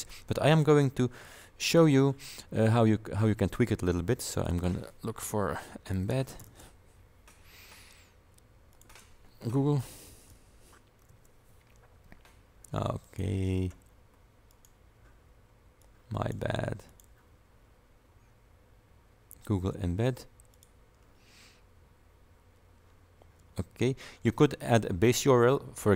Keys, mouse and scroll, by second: 0.6 click, 1.7 click, 4.4 click, 5.7-7.0 typing, 8.8 click, 9.6-11.1 typing, 11.2 Return, 13.1 click, 13.9 scroll up 2, 14.6 click, 15.9 click, 17.0 click, 20.6 click.